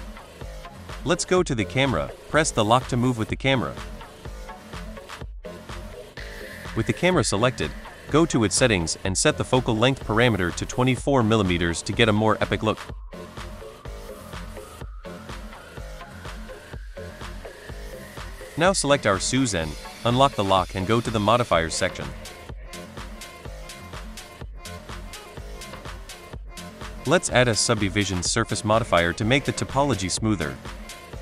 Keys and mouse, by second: 1.5 click, 2.2 click, 2.8-3.6 middle drag, 4.2 middle click, 4.8 middle click, 6.5 click, 7.4 click, 8.4-9.9 drag, 11.3 middle click, 12.1 middle click, 12.7 shift+middle drag, 13.2 middle click, 13.7 shift+middle click, 14.1 middle click, 18.0 click, 19.4 click, 20.8 click, 23.8 click, 24.8-27.6 drag, 29.6 click.